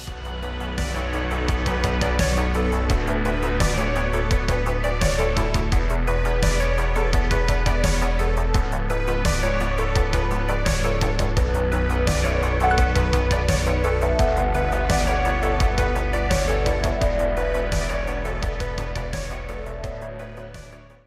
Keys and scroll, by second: 2.2 z, 3.4 shift+a, 4.6 s, 5.8 s, 6.3 Tab, 6.5 2, 6.7 g, 6.9 y, 8.2 a, 8.5 s, 8.7 x, 9.2 Tab.